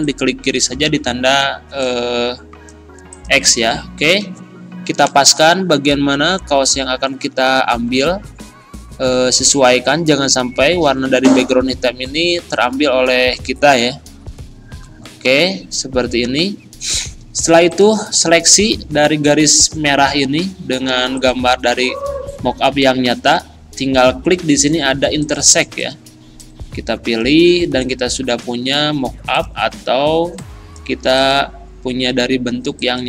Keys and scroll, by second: 5.4 Right, 7.9 Down, 9.0 Right, 11.6 Up, 13.6 Left, 14.2 Up, 14.7 Left, 15.4 Down, 18.7 ctrl+z.